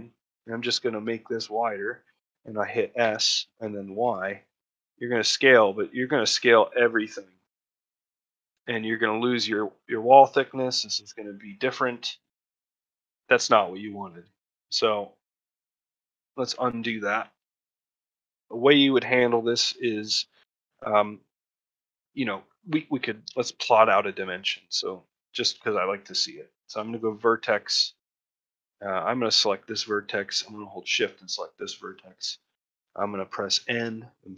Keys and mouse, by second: 1.4 middle click, 2.1 middle click, 8.3 shift+middle click, 8.8 ctrl+middle click, 10.5 ctrl+middle click, 11.8 ctrl+middle click, 12.3 shift+middle click, 12.7 ctrl+middle click, 13.0 shift+middle click, 13.3 middle click, 15.1 middle click, 15.4 shift+middle click, 15.7 middle click, 16.0 ctrl+middle click, 16.5 shift+middle click, 16.8 ctrl+middle click, 17.7 middle click, 18.0 shift+middle click, 22.5 middle click, 23.0 ctrl+middle click, 23.2 shift+middle click, 23.6 ctrl+middle click, 24.7 Tab, 26.7 click, 27.7 ctrl+middle click, 29.0 click, 31.3 shift+click, 32.0 ctrl+middle click, 32.3 shift+middle click.